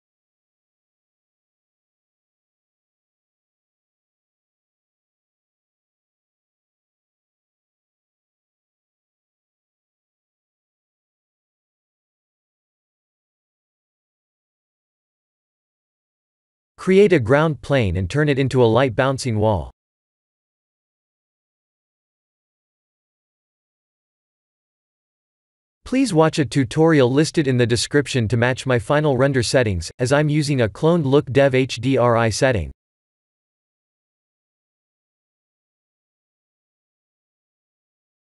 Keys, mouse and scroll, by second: 0.8-1.3 scroll down 4, 1.4 middle click, 3.6 click, 4.6-5.2 scroll down 2, 6.7 click, 7.2 click, 7.7 click, 8.2 ctrl+s, 8.8-9.3 scroll down 3, 9.3 middle click, 11.4 shift+middle click, 12.0 scroll up 3, 12.4 middle click, 13.5 shift+middle click, 13.9 middle click, 15.0 shift+middle click, 17.1 shift+a, 19.3 s, 22.5 ctrl+alt+KP_0, 23.4 shift+`, 26.5 shift+`, 31.1 click, 31.5 Tab, 31.9 2, 32.1 click, 32.8-33.4 scroll down 6, 33.2 middle click, 34.1-34.5 scroll down 2, 34.5 e, 36.8 click, 37.5 KP_1.